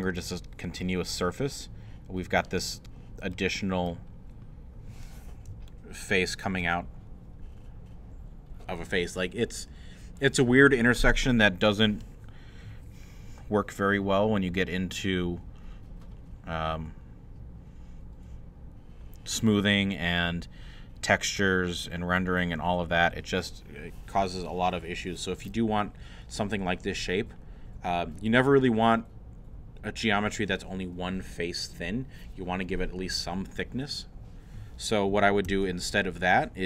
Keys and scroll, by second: 35.5 ctrl+z.